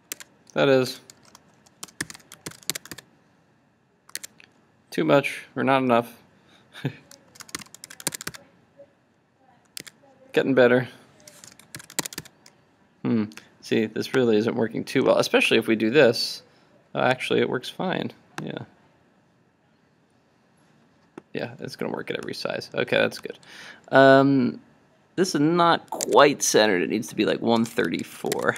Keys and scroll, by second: 0.3 super+Tab, 2.5 super+s, 2.8 super+Tab, 2.9 super+r, 4.2 super+Tab, 7.9 super+s, 8.2 super+r, 9.9 super+Tab, 11.9 super+s, 12.1 super+Tab, 12.2 super+r, 26.1 super+Tab, 28.0 super+s, 28.5 super+Tab.